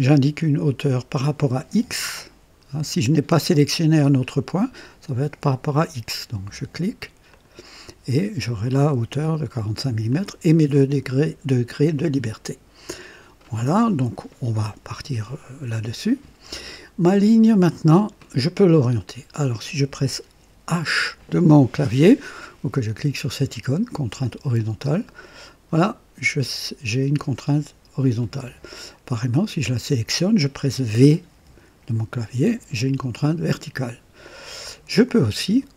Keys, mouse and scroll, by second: 7.2 click, 10.0 click, 17.8 click, 24.8 click, 28.2 click, 29.6 click, 31.2 v, 34.1 click.